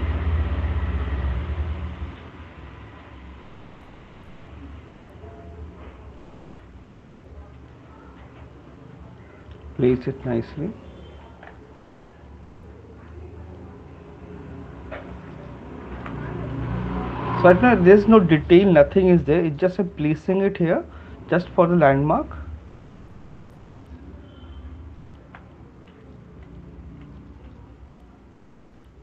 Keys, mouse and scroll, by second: 1.1 click, 3.1 click, 4.2 shift+click, 6.6 click, 8.1 shift+click, 9.9 click, 11.4 shift+click, 11.9 click, 13.5 click, 15.9 shift+click, 16.3 click, 16.8 alt+click, 17.8 click, 19.4 right click, 22.3 right click, 22.3 shift+click, 25.4 right click, 25.4 click, 26.1 shift+click, 27.4 shift+click.